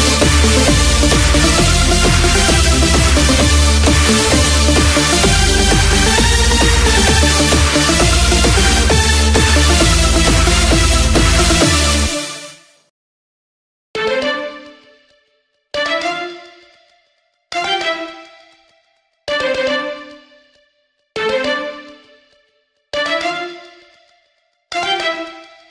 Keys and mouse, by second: 3.1 click, 8.4-10.4 right drag, 10.4 click, 13.7 click, 18.4 click.